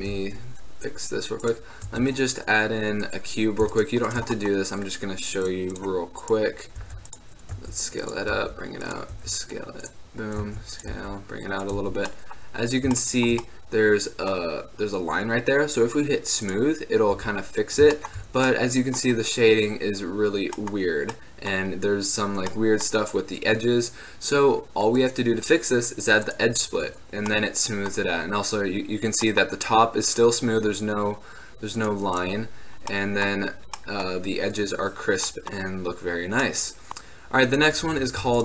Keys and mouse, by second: 0.1 shift+a, 1.9 click, 2.0 Tab, 3.2-5.2 drag, 5.6 middle click, 7.0 e, 7.6 s, 8.0 click, 8.4 g, 9.2 e, 10.5 s, 11.0 g, 11.9 Tab, 16.6 click, 17.3 t, 27.0 middle drag, 27.8 middle drag, 27.9 middle click, 28.1 middle drag, 30.8 middle click, 31.3-31.9 middle drag, 31.9-33.5 drag, 33.5-36.6 middle drag, 33.6 click, 36.6 middle click, 36.8 click, 38.2 x.